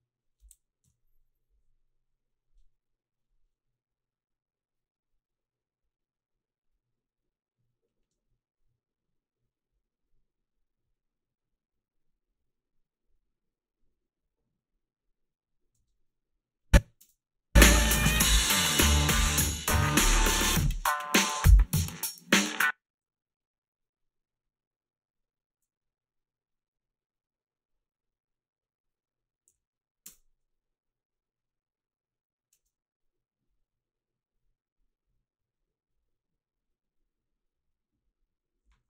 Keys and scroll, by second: 0.9 Home, 8.0 space, 15.8 space, 17.1 space, 22.5 space, 29.5 f, 30.1 space, 32.6 space.